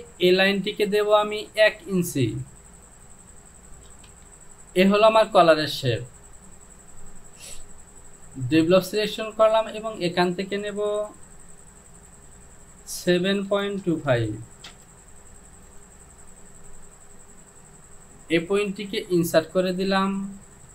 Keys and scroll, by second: 2.2 Down, 2.9 Down, 3.9 KP_1, 12.0 Down, 13.0 KP_7, 13.5 KP_Decimal, 13.8 KP_2, 14.1 KP_5, 14.7 Return.